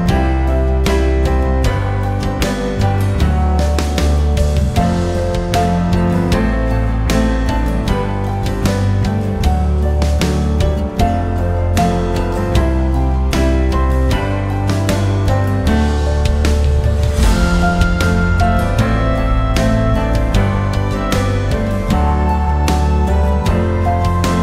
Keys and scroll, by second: 15.8 m.